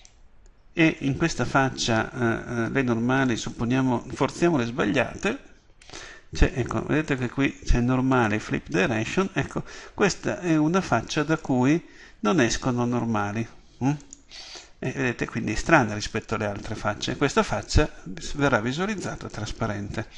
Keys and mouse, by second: 0.0-1.6 middle drag, 1.6 right click, 3.3-10.2 drag, 10.2-14.0 middle drag, 14.0 right click.